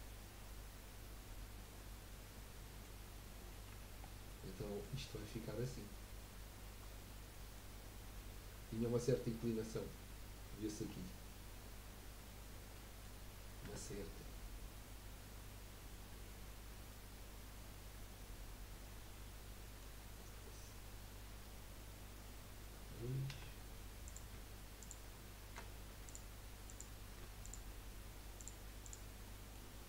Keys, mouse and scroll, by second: 3.1-3.7 scroll up 2, 3.7 Tab, 4.0 scroll down 3, 4.3-5.2 middle drag, 5.2 scroll down 1, 5.4 middle click, 5.9-6.3 scroll down 1, 6.3-7.8 middle drag, 7.8-10.8 scroll up 1, 10.8-11.6 scroll up 4, 12.7 middle click, 13.2-13.6 scroll up 1, 13.6 Tab, 14.0 scroll up 1, 14.3-17.4 middle drag, 23.3 2, 24.0 click, 24.8 shift+click, 26.0 click, 26.7 click, 27.4 shift+click, 28.4 shift+click, 28.8 shift+click, 29.2-29.8 shift+middle drag.